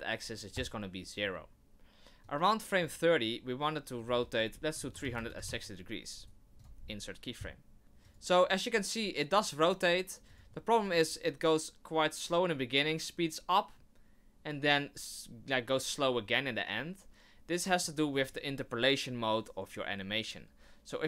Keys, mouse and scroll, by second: 2.3 click, 4.0 click, 6.2 right click, 7.8 click, 8.0 click, 10.3 click, 11.0 click.